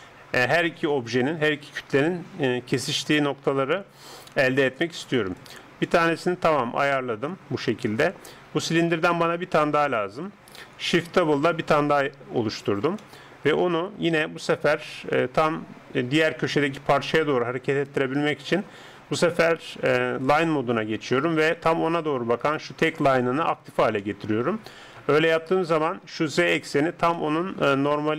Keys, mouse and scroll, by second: 5.9-7.7 middle drag, 9.0 KP_7, 11.2 shift+d, 13.0-14.6 drag, 14.6 middle click, 16.8-20.2 middle drag, 20.2-22.4 drag, 22.4 right click, 24.0-28.1 middle drag, 25.0 KP_7.